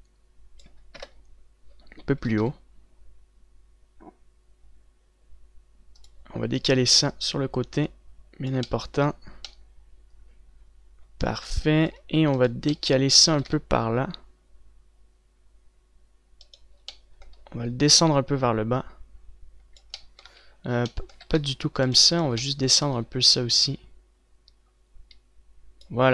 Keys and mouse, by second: 1.6 KP_0, 3.0 g, 7.3-13.1 middle drag, 14.2 click, 14.2 g, 15.0-20.2 drag, 18.6-20.2 right drag, 20.2 middle click, 21.0 ctrl+z, 21.8 z, 22.0 c, 23.0 z, 24.1 click, 24.1 middle click, 24.1 right click, 25.0-26.1 drag.